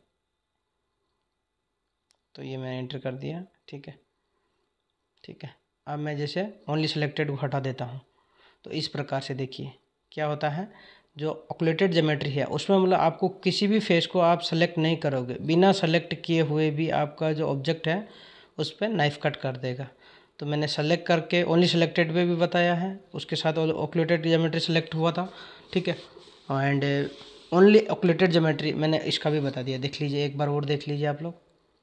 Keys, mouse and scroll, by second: 2.2 click, 3.5-6.5 drag, 17.7 click, 24.5 click, 26.6-29.6 drag.